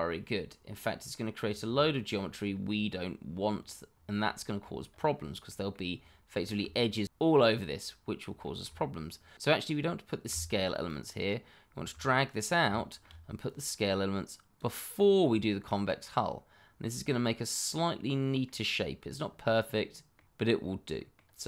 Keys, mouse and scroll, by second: 1.4-1.7 scroll down 1, 1.7 shift+middle click, 2.5-3.4 scroll up 1, 3.9 scroll down 1, 4.3 shift+middle click, 4.8-5.4 scroll up 1, 5.4 middle click, 5.9-6.3 scroll down 1, 6.4 shift+middle click, 8.5 shift+middle click, 10.8 click, 12.3-12.6 scroll down 1, 12.7 shift+middle click, 12.8 middle click, 12.9 shift+middle click, 13.4 click, 15.2-15.7 scroll down 1, 15.7 middle click, 19.0-19.4 scroll down 1, 19.4 middle click, 20.7-21.1 scroll up 1, 21.1 middle click.